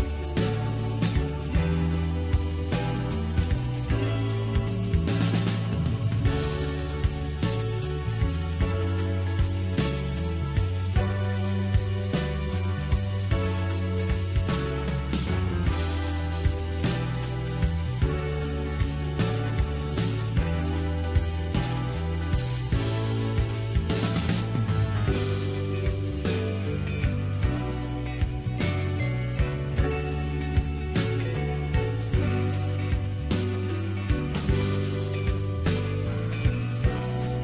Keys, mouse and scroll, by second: 1.6-2.0 scroll down 3, 2.0-5.0 middle drag, 5.0-5.9 scroll up 1, 5.9-7.6 shift+middle drag, 7.6-8.3 scroll up 5, 8.3-10.9 middle drag, 10.9-11.4 scroll down 7, 11.4-12.8 middle drag, 12.8 KP_1, 15.0 click, 15.8-17.6 scroll up 1, 17.6 click, 18.5-19.0 scroll down 1, 19.0-22.0 scroll up 1, 22.4 click, 23.3 KP_3, 25.7-26.9 scroll up 3, 26.9 click, 28.3 Tab, 29.5 Tab, 30.8-33.4 scroll down 2, 33.4-37.4 middle drag.